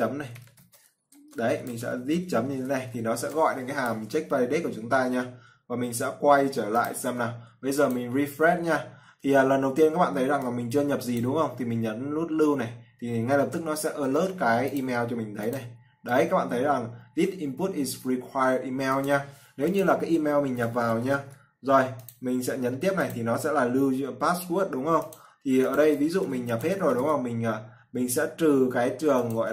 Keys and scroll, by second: 1.6 ctrl+v, 3.3 ctrl+s.